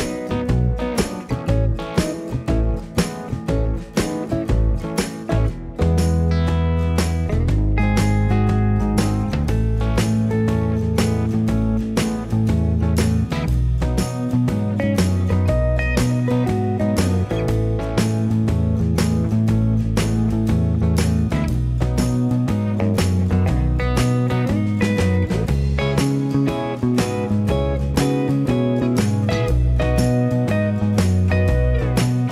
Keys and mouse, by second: 0.2 alt+z, 0.4 ctrl+KP_3, 0.8 e, 1.3 ctrl+click, 1.6 right click, 1.7 shift+click, 2.1 alt+z, 2.1 right click, 2.4 shift+click, 2.5-28.9 right drag, 3.0-4.6 drag, 3.8 s, 5.5 Tab, 9.6 shift+a, 11.1-15.3 typing, 11.5 click, 16.0 ctrl+KP_3, 16.3 ctrl+KP_3, 16.7 g, 18.6-26.3 drag, 18.6-26.3 middle drag, 26.3 Tab, 26.5 KP_1, 26.8 ctrl+KP_3, 27.0 1, 27.1 alt+z, 27.3-32.3 drag, 27.3-28.9 middle drag, 27.5 g, 30.6 shift+right click, 31.2 ctrl+KP_3, 32.2 shift+w.